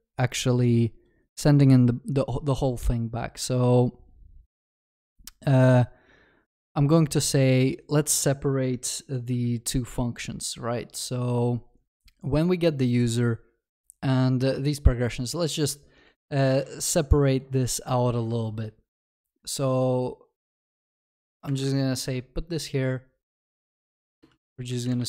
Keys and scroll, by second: 9.4 ctrl+b, 20.7 ctrl+c.